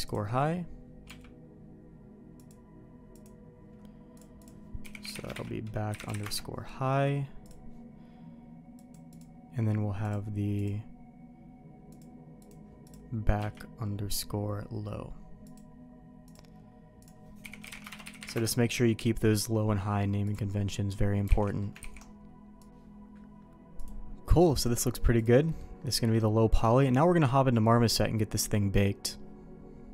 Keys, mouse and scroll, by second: 1.1 q, 8.8 click, 9.1-10.6 drag, 11.9 click, 12.4 click, 12.8 click, 13.4 q, 20.7 middle click, 21.4 alt+a, 21.4 middle click, 21.8 ctrl+s, 23.8 click, 25.1 click, 25.5 middle click, 26.0 middle click, 26.7 middle click.